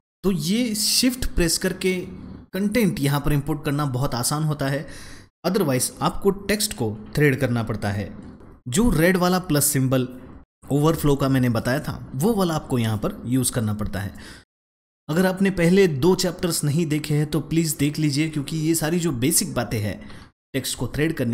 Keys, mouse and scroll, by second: 14.4 space, 14.5 click, 14.5 middle click, 14.6 click, 14.8 space.